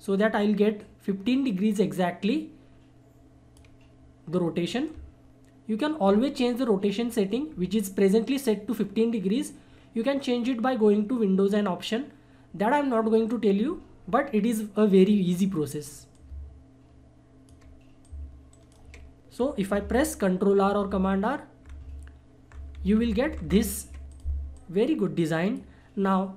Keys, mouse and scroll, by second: 4.8-8.4 drag, 16.1-18.0 drag, 18.0 click, 18.5 ctrl+right click, 20.7 ctrl+r, 24.1-26.3 drag.